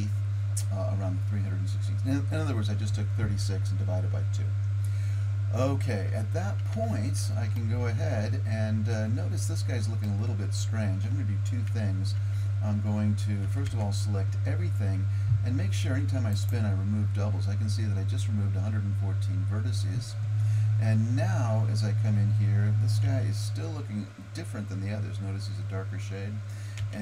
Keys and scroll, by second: 6.7 Tab, 12.2 Tab, 13.5 a, 13.7 a, 23.1 Tab, 26.8 Tab.